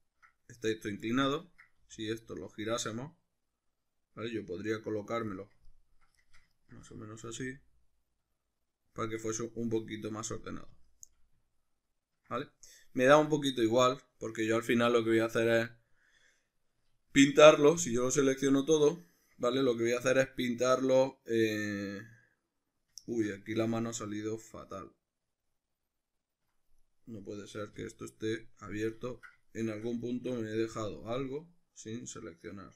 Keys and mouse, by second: 1.7 r, 5.4 click, 5.7-8.0 ctrl+middle drag, 7.3 r, 9.0-10.6 shift+drag, 10.6 r, 11.2 click, 11.5-26.8 ctrl+middle drag, 17.8 a, 26.8 right click, 27.8 l, 28.8-32.7 middle drag.